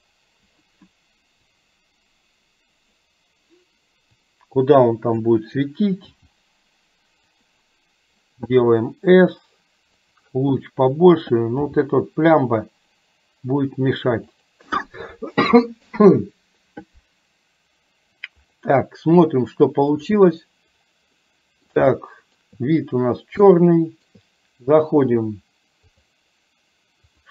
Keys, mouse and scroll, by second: 1.6-3.1 drag, 4.5 click, 6.1 g, 8.5 s, 11.7 g, 20.1 click, 21.2-21.7 middle drag, 22.0 shift+middle click, 23.5-24.2 shift+middle drag, 23.5 scroll up 1, 26.0 click.